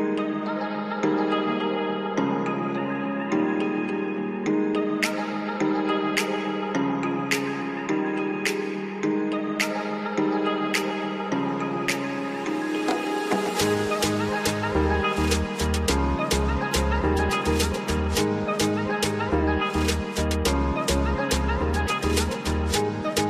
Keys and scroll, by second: 7.0 F3, 7.4 F2, 11.3 F3, 21.1 F3, 21.9 F2.